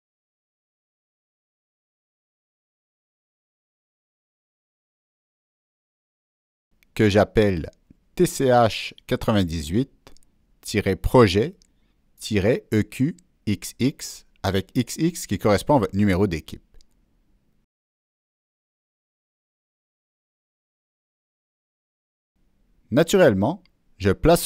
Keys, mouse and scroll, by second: 0.2 click, 2.0 click, 3.0 click, 6.6 Delete, 6.6 ctrl+v, 15.0 Return, 18.2 click, 18.4 Return, 19.2 Return, 19.2 click, 21.4 click.